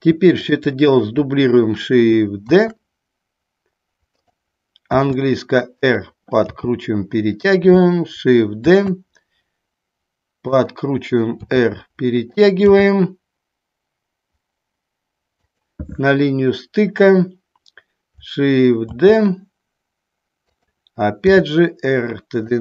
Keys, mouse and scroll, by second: 0.6 shift+click, 2.7 shift+d, 4.3 click, 5.1 r, 6.0 click, 6.7 g, 7.7 click, 8.8 shift+d, 10.6 click, 11.6 r, 12.8 g, 15.7 click, 19.1 shift+d, 21.4 r.